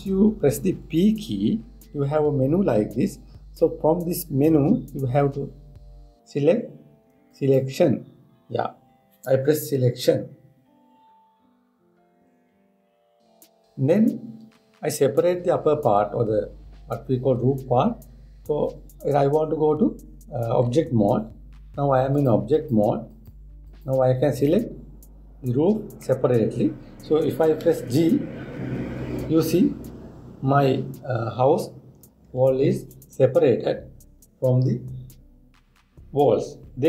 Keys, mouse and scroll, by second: 21.4 Tab, 22.8-23.8 drag, 24.0 click, 24.3 click, 25.1-28.2 middle drag, 29.3 g.